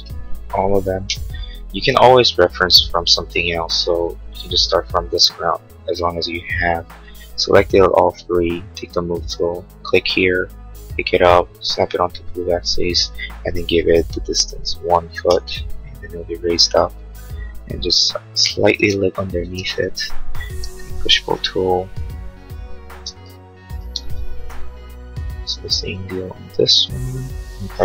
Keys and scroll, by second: 14.6-15.5 typing, 23.0 space, 24.5 p.